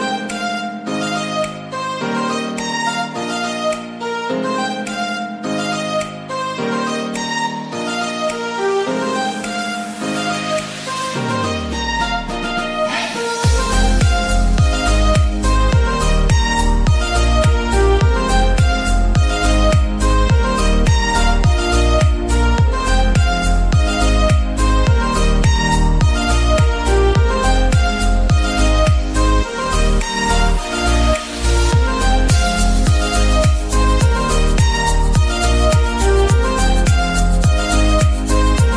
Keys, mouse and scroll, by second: 0.4 middle click, 1.4 ctrl+r, 2.0 ctrl+r, 2.0 click, 3.3 ctrl+r, 3.6 ctrl+r, 3.6 ctrl+click, 4.5 click, 5.1 scroll down 1, 5.4-6.8 middle drag, 6.8 ctrl+r, 7.5 click, 7.9 right click, 8.3-9.6 middle drag, 9.6 Tab, 9.9-10.9 scroll up 1, 10.9-12.1 scroll down 1, 12.2-13.5 drag, 13.5 scroll up 2, 13.8 middle click, 14.5-15.6 scroll up 3, 15.6-17.0 scroll up 2, 17.0 scroll up 1, 17.1 click, 17.9-20.9 drag, 26.3-27.1 scroll down 4, 27.9-28.4 scroll down 2, 28.5 click, 28.7-30.6 scroll up 3, 30.2 click, 32.4-36.3 drag, 36.2 l, 36.6 p, 37.0 o.